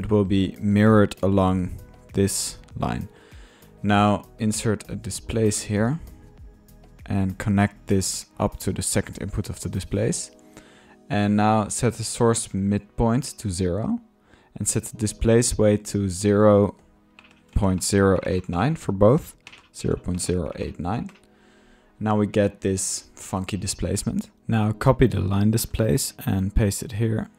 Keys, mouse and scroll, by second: 0.0 middle click, 0.2-0.7 drag, 0.5-2.0 middle drag, 1.8-2.5 typing, 3.7-4.8 drag, 5.1 click, 6.4 Tab, 6.4 typing, 6.5 click, 6.6 drag, 7.2 click, 8.1-9.6 drag, 9.8 click, 10.8 click, 11.5-13.4 middle drag, 13.5 middle click, 13.7 middle click, 15.9-16.4 drag, 16.4 click, 16.4 typing, 22.2-24.3 drag, 24.1-24.8 typing, 24.3 middle click, 24.6 drag, 26.0 ctrl+click, 26.2 ctrl+v, 26.5-26.9 ctrl+middle drag, 27.0-27.3 ctrl+drag.